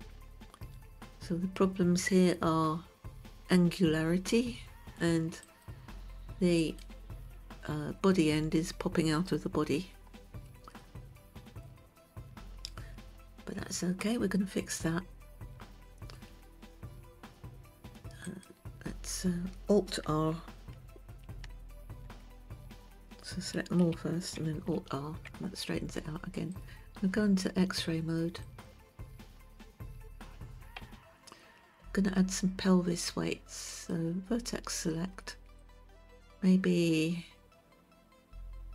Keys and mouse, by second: 7.2 click, 11.3-12.2 shift+middle drag, 18.7 click, 21.8 alt+r, 24.4 a, 25.3 alt+r, 27.0 click, 29.0 click, 31.4 Tab, 34.3 click, 36.2-38.7 ctrl+right drag.